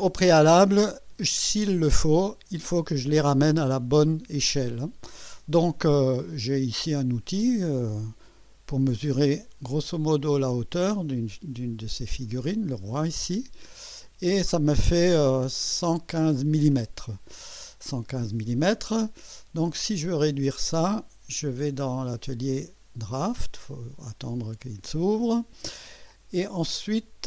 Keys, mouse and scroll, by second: 0.0 scroll down 1, 0.5-1.4 right drag, 8.4 click, 10.2 click, 12.7 click, 19.7 click, 22.1 click, 23.4 click.